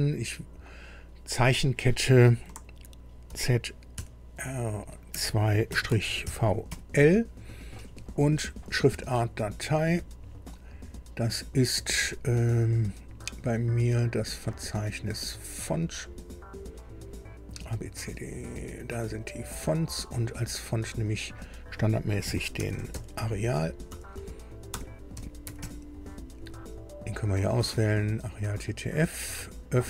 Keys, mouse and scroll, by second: 1.5 click, 3.2 shift+z, 3.9 shift+r, 5.1 2, 5.7 -, 6.2 shift+v, 6.6 shift+l, 9.7 click, 14.2 click, 15.2 scroll down 2, 15.9 scroll down 2, 16.6 scroll down 2, 17.4 scroll down 2, 18.0 scroll down 2, 19.0 click, 20.3 click, 21.4 click, 22.0-26.1 typing, 27.5 click, 29.1 click.